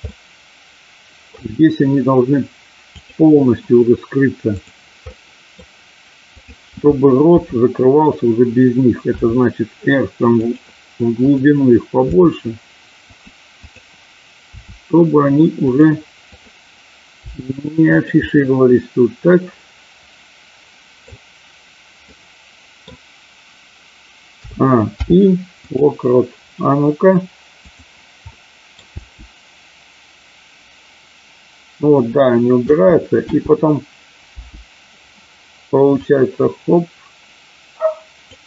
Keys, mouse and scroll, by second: 0.0-1.3 middle drag, 2.8 click, 4.6 click, 5.0 middle click, 6.2 click, 7.2 KP_7, 9.1 r, 10.4 click, 11.2 click, 12.1 r, 13.1 click, 13.5 click, 14.5 r, 15.6 click, 16.4 click, 17.1 r, 17.9 click, 18.1-21.0 middle drag, 22.1 middle click, 24.4 a, 25.0 i, 27.6 click, 28.4 middle click, 28.9 space, 32.6 space, 33.2 space, 34.3 space, 35.9-38.3 drag.